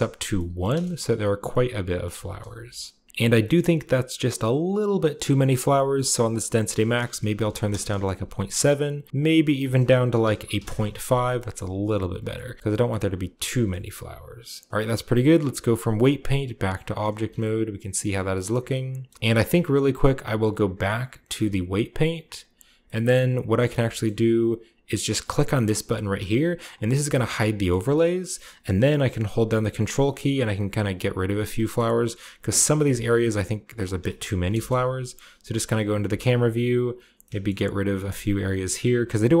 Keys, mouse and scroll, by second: 0.1-0.9 scroll down 1, 0.2-3.0 middle drag, 0.9-1.4 shift+scroll up 1, 2.5 KP_0, 6.2-8.7 drag, 7.2 ., 7.5 7, 7.6 Return, 8.7-9.4 scroll down 1, 8.7 typing, 9.4-10.9 drag, 9.8-12.0 typing, 11.4-12.1 shift+scroll up 1, 11.5 shift+middle click, 12.1-13.3 shift+scroll up 2, 12.5 shift+middle click, 12.8 shift+middle click, 13.3 shift+scroll up 1, 13.4 shift+scroll down 1, 14.4 shift+middle click, 14.4-15.2 shift+scroll down 1, 15.2-15.7 scroll down 1, 15.8 click, 16.4 click, 17.1 a, 17.3-18.4 shift+middle drag, 18.4 shift+middle drag, 18.4-19.1 shift+scroll down 1, 19.0 shift+middle click, 19.1 shift+middle click, 19.9-20.9 right drag, 20.9-23.7 drag, 22.7-23.7 middle drag, 23.9-25.9 shift+middle drag, 27.0 click, 27.4-29.3 middle drag, 27.6-29.3 scroll up 1, 29.6 ctrl+click, 29.9 ctrl+click, 30.2 ctrl+click, 30.3 ctrl+click, 30.7 ctrl+click, 30.9 ctrl+click, 31.0 ctrl+click, 31.2 ctrl+click, 31.3-32.4 scroll down 1, 31.5-32.5 middle drag, 32.5 ctrl+click, 32.9 ctrl+click, 33.1 ctrl+click, 33.2 ctrl+click, 33.4 ctrl+click, 33.5 ctrl+click, 33.7-35.6 ctrl+drag, 33.8-35.6 ctrl+scroll down 2, 34.0-35.6 ctrl+middle drag, 34.4 KP_0, 35.7 ctrl+click, 36.5 click, 36.8 click, 36.9 click, 37.1 middle click, 38.4 click, 38.4 middle click, 38.6-39.4 ctrl+drag.